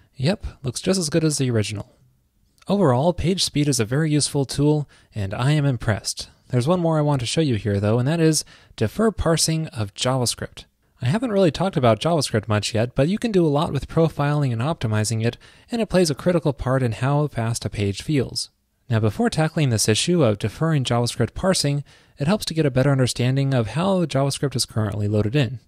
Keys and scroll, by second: 1.9 super+w.